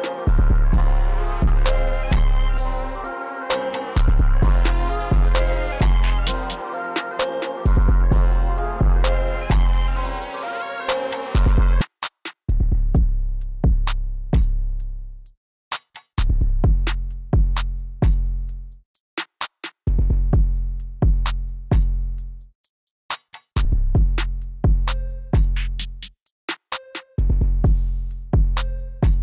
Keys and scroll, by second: 1.9 e, 3.1 super+b, 3.2 super+b, 3.4 super+b, 5.4 super+s, 5.6-7.6 typing, 8.8 super+s, 10.2 super+s.